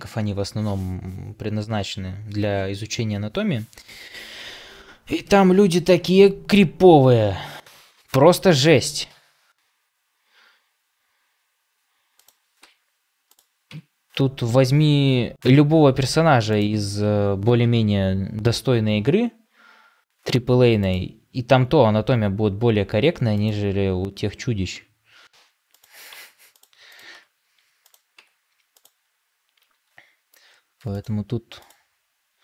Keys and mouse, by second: 12.5 Tab, 13.6 Tab, 14.4-16.0 middle drag, 17.5 KP_7, 22.0 r, 24.5 g, 26.0 Tab, 27.0 Tab, 29.5 r.